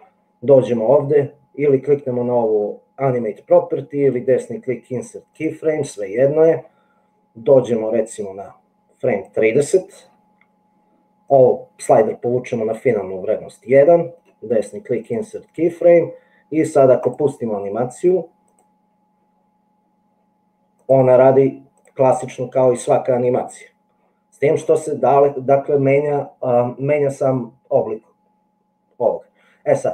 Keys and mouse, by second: 4.3-5.7 right drag, 7.7-9.3 middle drag, 11.4-13.0 drag, 14.5 right click, 20.8 middle click, 21.9 middle click.